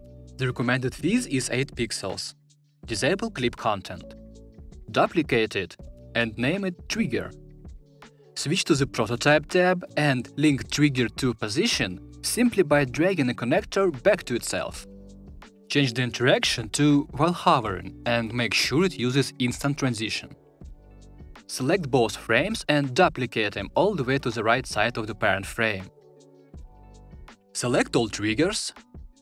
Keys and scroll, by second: 4.8 super+d, 23.8 super+d.